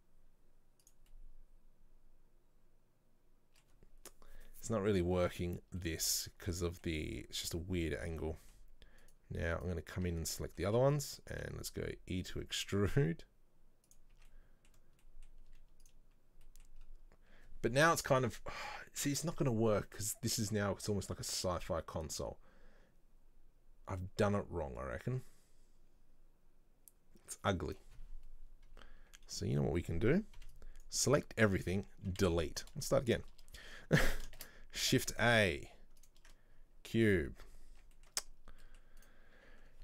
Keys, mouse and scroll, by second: 1.2-4.2 middle drag, 4.2-4.8 scroll down 2, 4.8-7.7 middle drag, 7.7-8.1 scroll up 2, 8.2 Tab, 8.3 middle click, 9.1 right click, 9.7 right click, 10.2 Tab, 10.5 middle click, 10.8 a, 14.2 Tab, 14.4-14.8 middle drag, 14.8 scroll down 1, 15.1-15.6 middle drag, 15.6 z, 16.6-16.9 middle drag, 16.9-20.0 scroll up 1, 26.0 scroll down 1, 27.9-28.6 scroll down 1, 29.4 middle click, 29.7 scroll down 1, 30.5 b, 31.3-32.4 scroll down 1, 32.4 Delete, 32.7-33.1 scroll up 2, 33.1-34.5 scroll down 1, 34.5 shift+a, 36.6-37.0 scroll down 2, 37.1-37.8 middle drag, 37.8 Tab, 38.1-39.1 middle drag, 39.1 right click.